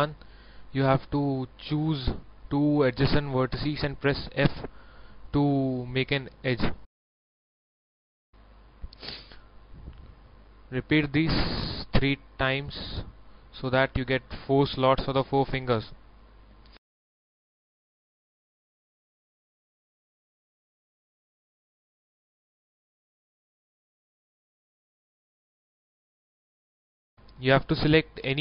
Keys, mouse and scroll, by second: 0.7 shift+middle click, 1.7 shift+right click, 2.1 shift+right click, 2.9 scroll up 1, 3.3-4.2 scroll down 1, 6.2 shift+middle click, 7.7 scroll up 1, 8.2 shift+middle click, 9.3 shift+right click, 10.3 shift+right click, 12.1 shift+right click, 12.6 shift+right click, 13.6 shift+f, 14.0 middle click, 17.4-18.0 scroll up 1, 18.0-18.4 scroll down 1, 20.5 shift+right click, 20.9 shift+right click, 21.2 shift+right click, 21.7 shift+right click, 22.5-23.7 middle drag, 24.5 shift+middle click, 25.2 scroll up 1, 27.5-28.4 middle drag.